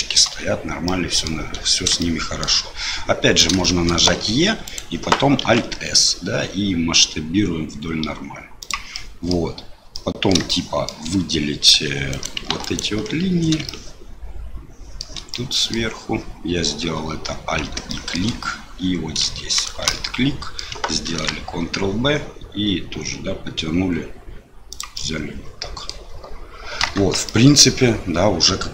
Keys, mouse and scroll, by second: 0.8 middle click, 2.0 shift+middle click, 3.6 shift+click, 4.1 e, 5.4 alt+s, 8.9 middle click, 9.9 middle click, 10.5 shift+middle click, 11.7 2, 12.1 click, 12.6 alt+click, 13.6-15.0 shift+middle drag, 15.3 middle click, 17.9 shift+middle click, 19.5 alt+shift+click, 19.9 middle click, 21.1 ctrl+b, 25.1 click, 26.9 Tab, 27.2-28.7 middle drag.